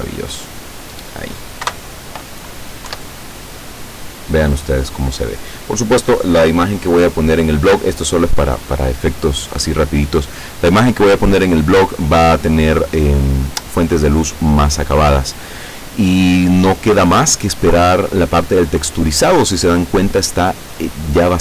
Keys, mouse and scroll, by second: 1.7 Pause, 3.0 F12.